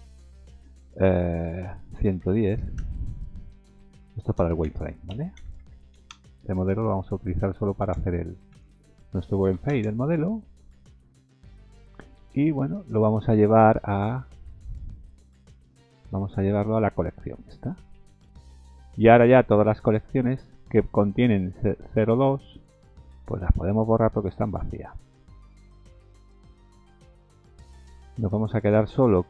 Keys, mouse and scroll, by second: 2.1 KP_1, 12.5-13.7 scroll down 10, 13.7-14.2 scroll up 6, 14.7 click, 14.7 scroll up 1, 15.7-16.6 scroll down 6, 18.5-19.5 scroll up 1, 19.7 click, 20.5 right click, 24.5 click, 24.8 right click, 26.1-26.7 scroll up 1, 26.7 click, 26.9 right click, 28.6 click, 28.8 right click.